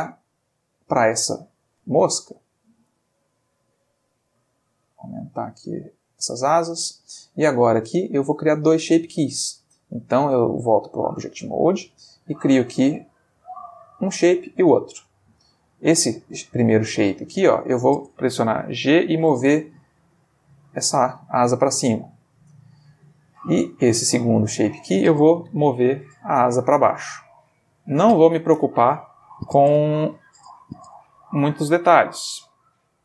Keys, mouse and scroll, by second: 2.8 middle click, 3.4 s, 6.1 click, 7.8 click, 9.3 Tab, 12.2 click, 14.0 click, 16.5 click, 17.1 Tab, 18.8 g, 19.3 z, 21.2 click, 23.0 Tab, 23.8 click, 24.2 Tab, 25.5 g, 27.5 click, 28.9 ctrl+z, 30.8 middle click, 32.2 g, 32.4 z.